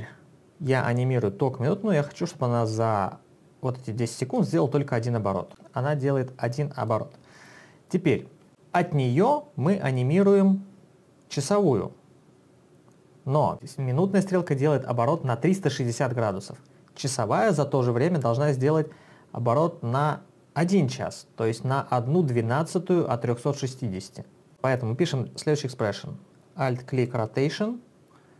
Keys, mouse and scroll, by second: 4.4 click, 5.5 click, 7.0 space, 8.2 space, 11.3 click, 27.0 alt+click.